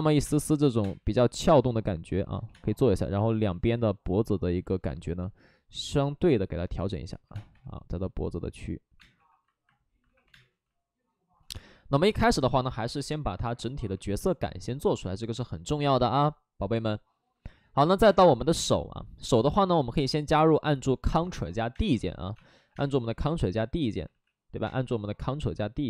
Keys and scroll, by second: 0.1 3, 0.8 space, 2.4 2, 3.4 ctrl+z, 7.2 3, 7.3 space, 7.5 3, 8.9 space, 9.1 1, 10.2 2, 10.3 space, 18.0 space, 21.5 3, 21.7 space, 22.3 space, 22.6 3, 24.0 ctrl+z, 24.6 space.